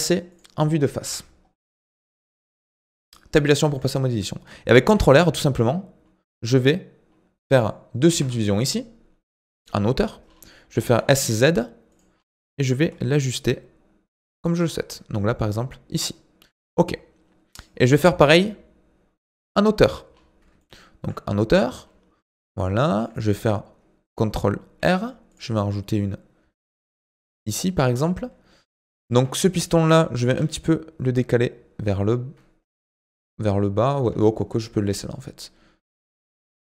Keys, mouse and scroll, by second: 0.3 click, 1.0 KP_1, 1.6-1.9 scroll up 3, 2.0 Tab, 2.3 shift+middle click, 2.8 scroll up 1, 3.5-4.8 shift+middle drag, 4.8 ctrl+r, 8.4-9.5 scroll down 10, 9.5-10.2 scroll up 1, 10.2-10.9 scroll up 4, 10.9 s, 12.1-12.6 scroll up 4, 12.6 s, 14.6-16.0 scroll up 4, 16.0-16.8 scroll down 4, 16.8 middle click, 17.7 scroll down 4, 18.0-19.3 middle drag, 19.3 KP_7, 20.1-20.6 scroll up 4, 20.6 shift+middle click, 21.3-21.8 scroll up 2, 22.6-24.8 shift+middle drag, 24.8 ctrl+r, 29.1 Tab, 29.5 click, 30.3 g.